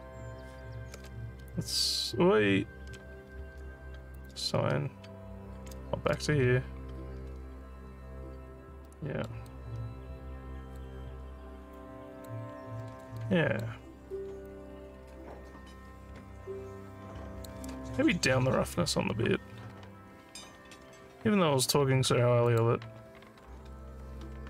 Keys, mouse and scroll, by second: 1.4 Tab, 4.2 click, 5.1 Tab, 8.9 alt+middle click, 9.2 alt+scroll down 1, 9.5-10.7 alt+drag, 11.1 scroll down 1, 11.8 alt+click, 12.6 alt+scroll down 1, 12.9 alt+middle click, 13.2 alt+click, 14.1 alt+scroll down 1, 14.5-17.5 alt+drag, 22.5 click, 23.7-24.2 scroll down 3.